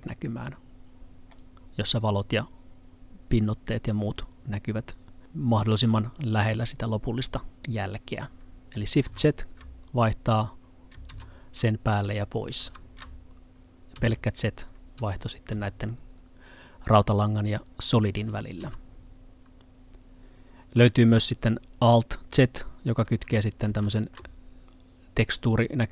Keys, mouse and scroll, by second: 9.1 z, 11.1 z, 12.6 z, 15.5 z, 18.2 z, 18.7 z, 23.7 z.